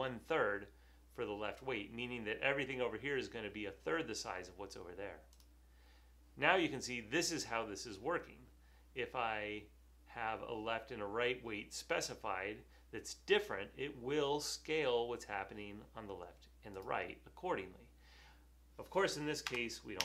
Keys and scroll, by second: 19.6 BackSpace.